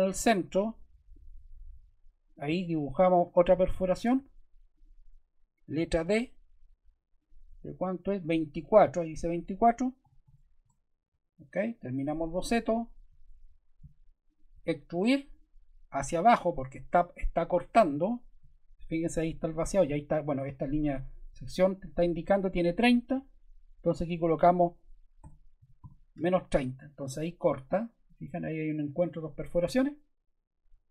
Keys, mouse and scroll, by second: 3.2 click, 4.0 ↺, 4.7 click, 5.9 d, 7.1 click, 8.1 click, 9.7-10.7 typing, 24.9-26.3 typing, 26.5 Return.